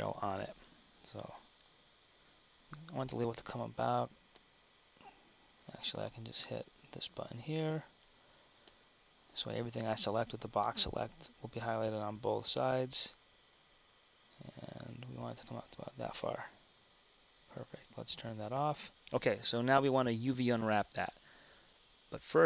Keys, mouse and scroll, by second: 1.5 KP_3, 3.2 b, 8.8 click, 9.8 b, 18.9 KP_1.